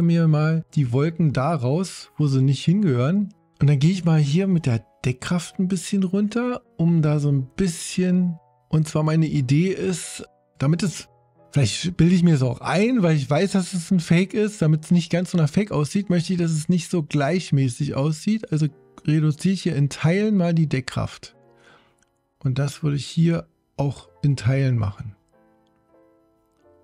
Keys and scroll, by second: 5.9 5.